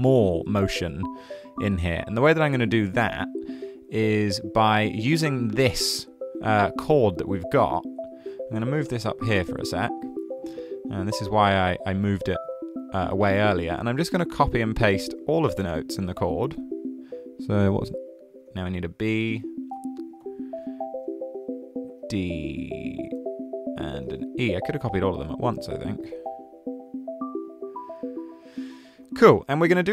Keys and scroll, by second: 13.4 super+c, 14.3 super+v, 18.5 super+c, 19.3 super+v, 20.2 super+z, 22.0 super+c, 23.2 super+v, 25.7 super+z, 27.8 super+c, 29.1 super+v.